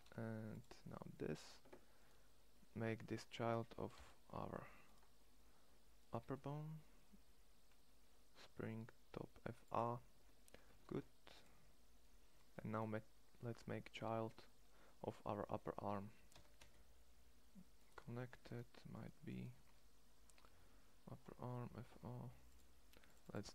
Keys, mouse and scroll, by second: 3.7 ctrl+p, 5.9 g, 10.5 shift+s, 16.0 e.